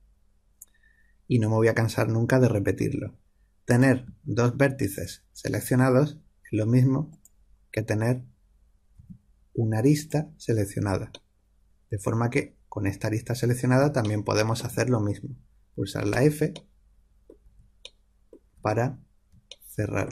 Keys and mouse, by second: 3.7-6.5 drag, 8.9 a, 16.0 f, 16.9-18.5 middle drag, 17.4 f, 18.5 f.